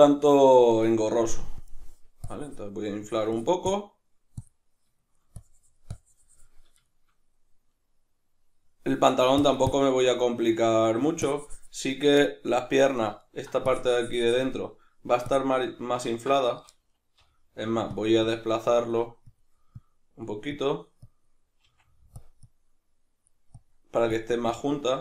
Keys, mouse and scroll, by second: 1.6 click, 2.3-5.0 drag, 5.0 shift+middle click, 5.4-6.9 drag, 6.9-9.4 shift+middle drag, 9.4-10.7 drag, 10.7 ctrl+middle click, 11.2-13.2 drag, 13.2 ctrl+middle click, 13.7-18.0 drag, 16.1 ctrl+z, 17.2 g, 17.6 f, 18.2-22.2 drag, 21.6 f, 22.4-25.0 drag.